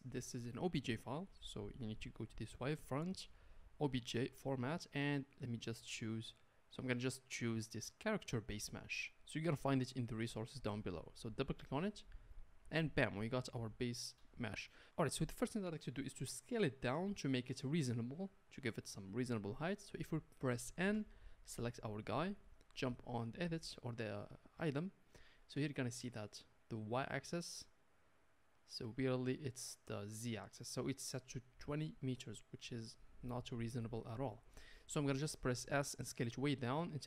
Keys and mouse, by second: 13.6-21.4 middle drag, 20.8 n, 21.4 click, 27.1-28.9 drag, 30.8-37.0 middle drag, 35.7 s.